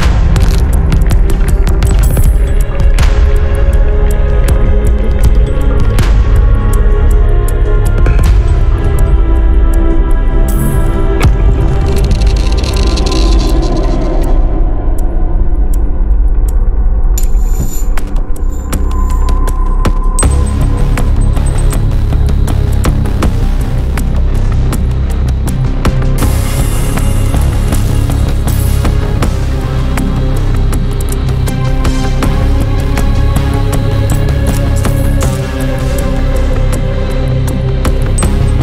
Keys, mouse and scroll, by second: 1.4 click, 6.3 click, 7.5 4, 8.6 click, 9.1 click, 10.2 4, 10.9 0, 13.9-15.5 drag, 15.7-16.6 typing, 17.4 click, 20.0-21.3 drag, 22.0 5, 22.5 click, 23.5 5, 25.5 click, 26.8 1, 27.7 0, 29.8 click, 30.8 scroll down 2, 31.5 scroll up 1, 33.3 click, 34.8 click, 35.6-37.4 drag.